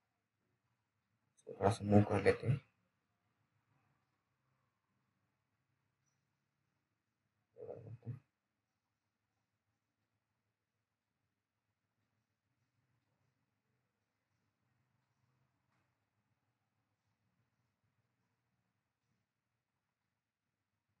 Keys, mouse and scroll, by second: 1.5 click, 6.2 click, 6.6-7.4 scroll up 1, 7.4 click, 7.4 click, 8.8 scroll down 1, 9.0 middle click, 11.4 scroll down 1, 11.7 middle click, 12.8 click, 13.4-13.9 scroll up 1, 14.8 click, 15.4 alt+middle click, 15.9 scroll down 1, 16.2 middle click, 16.5 scroll down 1, 16.6 middle click, 16.9-17.3 scroll up 1, 17.3 click, 17.6-19.1 scroll up 1, 20.7-21.0 scroll down 1.